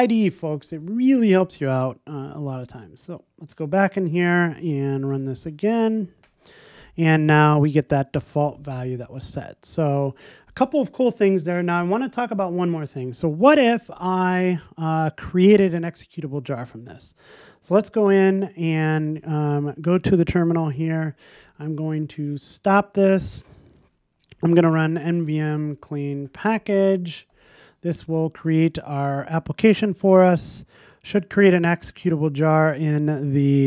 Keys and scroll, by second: 9.6 shift+Escape, 22.4 super+F2.